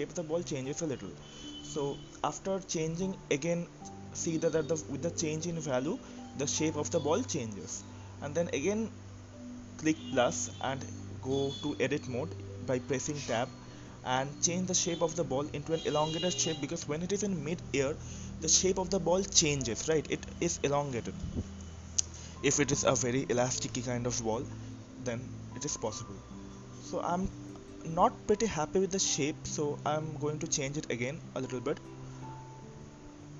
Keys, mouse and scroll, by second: 1.0-5.0 drag, 5.0-6.2 scroll down 1, 6.2-6.6 shift+drag, 6.2-6.9 shift+middle drag, 6.9-7.4 scroll down 1, 7.4-10.5 shift+middle drag, 10.5 Tab, 11.3 click, 15.6 click, 16.2 click, 20.7 Tab, 22.2-25.5 drag, 29.0 Tab, 30.7 click, 30.9 click, 32.1 s.